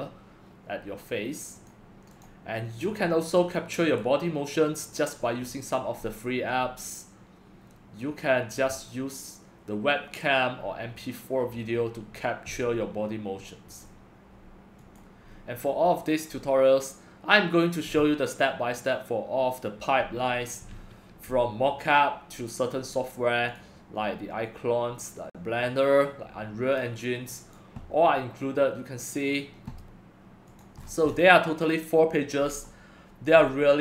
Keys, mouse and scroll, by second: 1.7-2.8 drag, 2.8-5.6 middle drag, 2.8-4.8 scroll, 4.8-5.6 scroll, 5.6-6.1 scroll down 4, 6.1-11.1 middle drag, 6.1-9.8 scroll, 11.1 scroll down 3, 11.1-15.0 middle drag, 11.1-13.8 scroll, 13.8-14.8 scroll, 15.0 click, 15.3-20.4 middle drag, 15.3 scroll, 20.4 scroll down 1, 23.6-30.8 drag, 30.8-33.8 middle drag, 30.8-32.4 scroll, 32.4-33.3 scroll, 33.3-33.8 scroll.